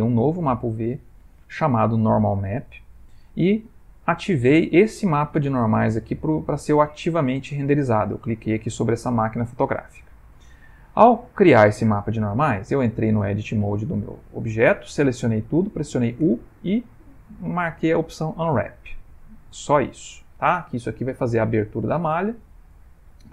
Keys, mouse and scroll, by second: 0.8 click, 12.7 middle click, 13.5 Tab, 14.0 middle click, 14.5 middle click, 14.6 middle click, 16.2 u, 20.7 middle click, 21.9 middle click, 23.0 Tab.